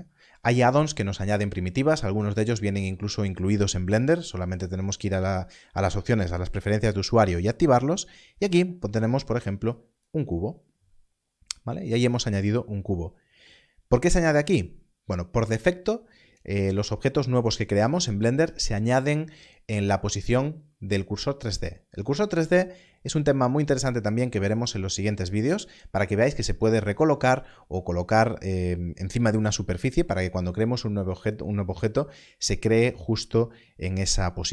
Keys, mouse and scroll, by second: 9.7 click.